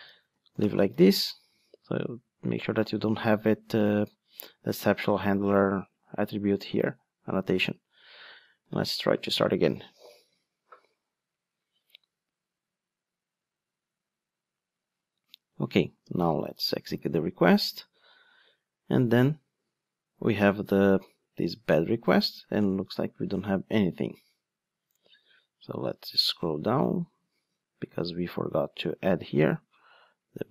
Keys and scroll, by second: 7.0 Escape, 8.6 ctrl+d.